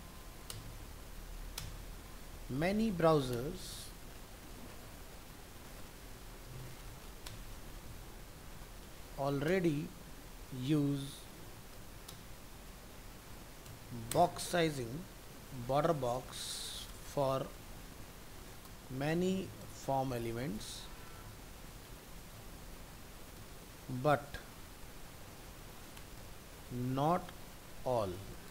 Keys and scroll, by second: 0.8 ctrl+s, 14.2 ctrl+v.